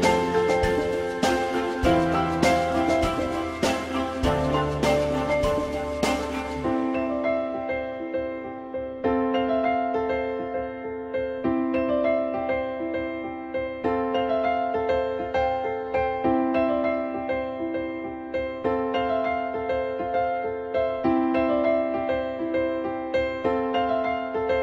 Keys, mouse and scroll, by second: 1.0-1.7 typing, 4.1 ctrl+click, 5.4 ctrl+z, 11.8-12.6 typing, 19.2 l, 19.7 z.